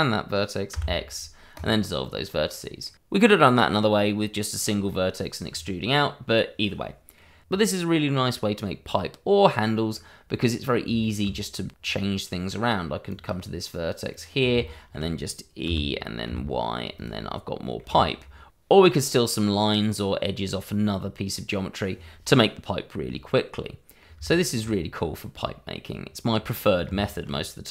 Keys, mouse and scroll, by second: 0.7 x, 1.5 click, 2.1 middle click, 4.4 shift+middle click, 5.3 middle click, 6.6 middle click, 8.4 click, 9.1 scroll down 1, 9.4 middle click, 10.1-10.5 scroll up 1, 10.5 middle click, 11.1 shift+middle click, 13.1 click, 14.6 shift+middle click, 15.6 e, 16.2 y, 16.9 click, 17.3 middle click, 18.3 shift+middle click, 18.4 scroll up 1, 18.7 click, 23.2 middle click, 24.7-25.3 scroll up 1, 25.3 scroll up 1, 25.3 middle click, 25.9-26.8 scroll down 1, 27.0-27.3 scroll down 1, 27.5-27.7 scroll up 1.